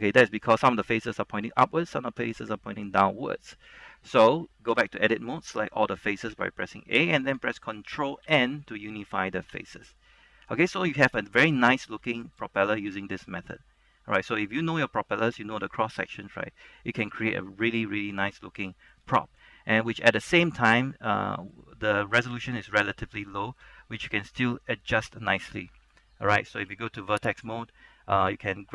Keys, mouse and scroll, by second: 0.8 shift+middle click, 3.3-4.8 shift+middle drag, 4.8 Tab, 5.7 Caps_Lock, 5.7-6.4 typing, 8.4 ctrl+n, 9.7 Tab, 10.1 middle click, 11.8 shift+middle click, 12.2 middle click, 12.5-19.2 shift+middle drag, 20.0 Tab, 20.3 scroll down 1, 20.9 shift+middle click, 26.8 ctrl+Tab, 27.5 click, 28.3 a.